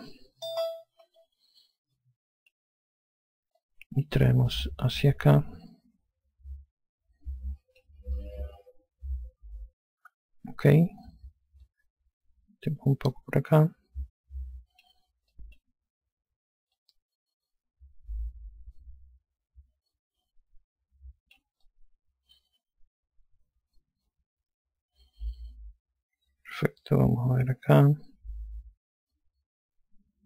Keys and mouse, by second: 0.0-0.5 typing, 1.8 alt+click, 4.2 click, 8.7 alt+click, 12.2 click, 15.9 click, 17.3 click, 22.2 alt+click.